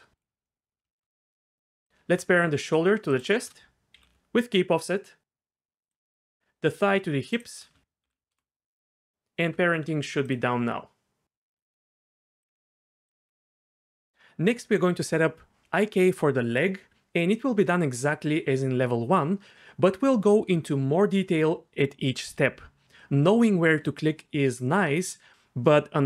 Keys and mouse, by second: 3.1 shift+click, 3.9 ctrl+p, 6.4 ctrl+z, 8.0 ctrl+p, 9.5 Tab, 10.4 g, 12.4 click, 12.5 r, 13.2 r.